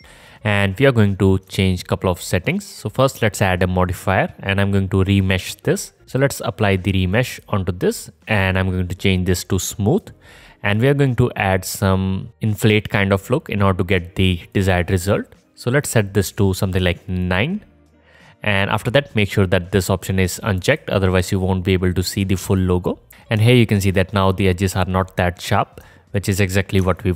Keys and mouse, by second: 0.0-0.4 alt+drag, 0.0-3.0 alt+middle drag, 0.0-0.4 alt+right drag, 9.6 middle click, 14.7-17.7 middle drag, 22.6-23.5 alt+drag, 23.5 right click, 23.5-25.1 alt+drag, 25.1 alt+right click, 25.1-25.8 alt+middle drag, 26.0 right click, 26.8-27.1 alt+shift+drag.